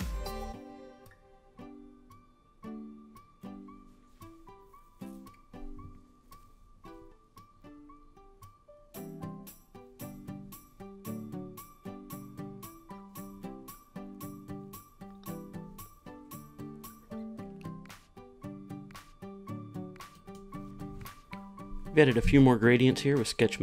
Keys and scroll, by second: 4.3 super+v, 4.3 Return, 12.6 r, 15.6 Return, 23.5 super+s.